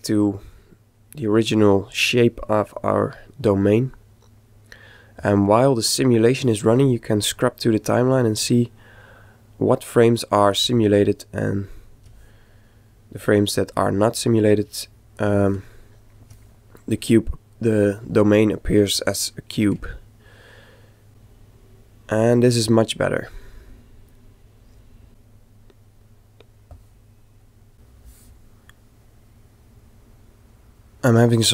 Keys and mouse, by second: 1.5-5.8 middle drag, 7.3 click, 11.1-12.8 ctrl+middle drag, 13.2 ctrl+click, 15.7-16.9 middle drag, 16.9 click, 19.3-21.1 middle drag, 23.5-26.4 middle drag, 27.5 click, 28.6-30.4 middle drag.